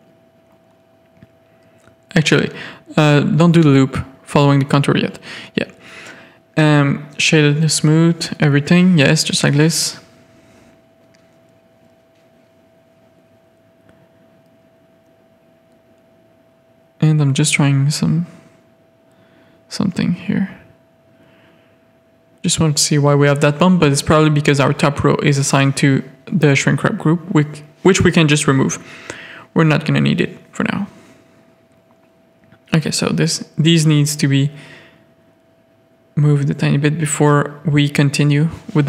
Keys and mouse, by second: 0.0 shift+middle click, 0.7-1.6 middle drag, 1.7 Tab, 2.6 a, 3.1 alt+click, 3.4-3.7 middle drag, 3.8 g, 5.1 a, 6.2 click, 8.6 g, 16.2 middle click, 17.3 click, 17.5 g, 18.4 click, 19.7 ctrl+z, 20.3 click, 21.2 click, 22.0 g, 23.2 click, 25.4 click, 25.8 click, 26.2-27.8 drag, 27.8 middle click, 28.4 Tab, 29.0 alt+a, 29.2-30.3 middle drag, 30.4 Tab, 30.5 middle click, 31.3 z, 31.5 a, 31.8 click, 32.5 z, 33.2 click, 34.5 click, 35.8 click, 36.2 ctrl+z, 37.2 ctrl+z.